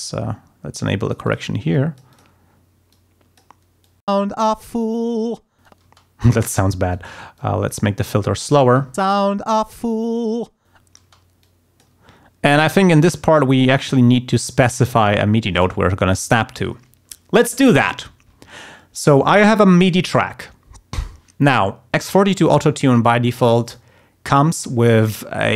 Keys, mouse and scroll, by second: 0.0-1.5 drag, 1.7 click, 2.9 click, 3.8 click, 4.2 space, 5.8 space, 6.9 click, 7.3 click, 8.7 click, 9.0 space, 11.0 space, 11.4 click, 13.7-14.8 drag, 15.1 click, 19.2 click, 22.1 click, 23.6 click.